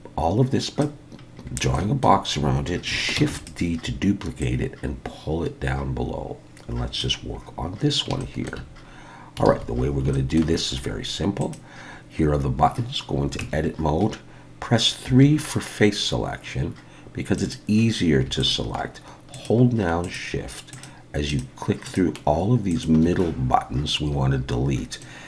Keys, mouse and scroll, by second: 1.2-1.7 scroll down 4, 1.7 shift+middle click, 3.2 shift+d, 4.4 click, 7.4-8.1 scroll up 5, 8.2 shift+middle click, 8.9-9.4 scroll down 1, 9.5 alt+a, 9.8 scroll up 2, 10.1 shift+middle click, 11.4 click, 13.4 Tab, 15.1 3, 17.4 click, 18.4 shift+click, 19.3 shift+click, 20.0 shift+click, 20.7 shift+click, 21.3 shift+click, 21.9 shift+click, 22.7 shift+click, 25.0 middle click.